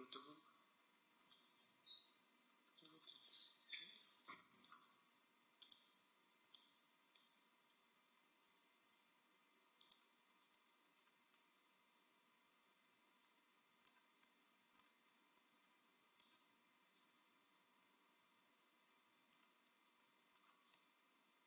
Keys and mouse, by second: 2.4-5.5 middle drag, 5.5-7.2 drag, 7.4 Tab, 10.9 middle click, 11.9 middle click, 13.1 middle click, 14.1 middle click, 16.4 Tab, 17.0 Tab.